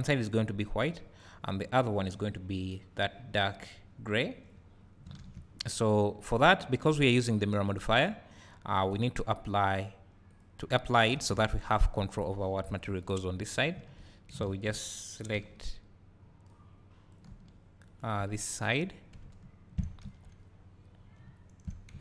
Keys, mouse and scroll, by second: 0.4-4.8 scroll up 2, 4.8-7.1 scroll down 2, 7.1 click, 10.6 click, 11.2 Tab, 12.7 KP_7, 13.5 scroll down 1, 13.8 z, 14.5 alt+a, 17.1 b, 19.2 `, 21.0 scroll up 1, 21.4 `.